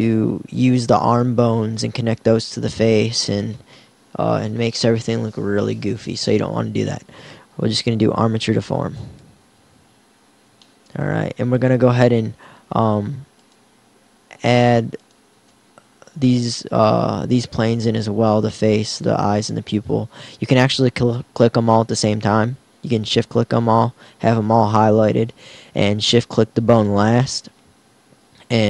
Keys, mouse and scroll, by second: 14.9-17.0 drag, 25.3-28.2 drag.